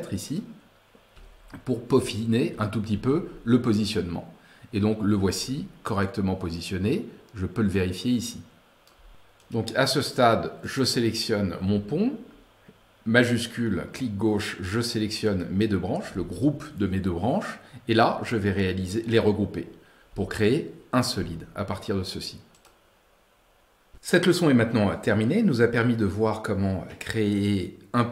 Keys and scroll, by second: 2.4 Right.